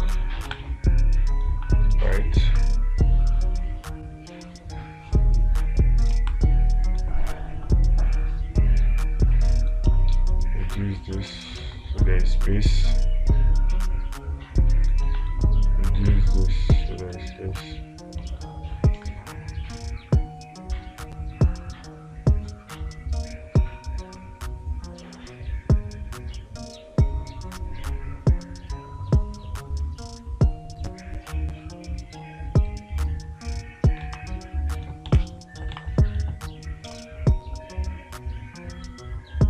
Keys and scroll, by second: 0.0 space, 0.9 space, 6.6 space, 34.5 space, 36.2 space.